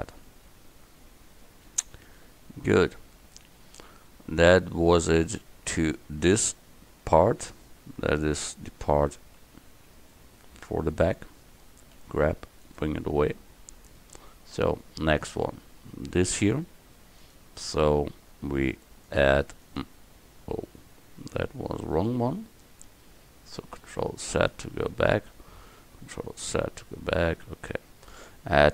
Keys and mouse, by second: 6.2 middle click, 7.0-8.3 middle drag, 8.3 KP_1, 12.0 g, 24.1 ctrl+z, 26.5 ctrl+z.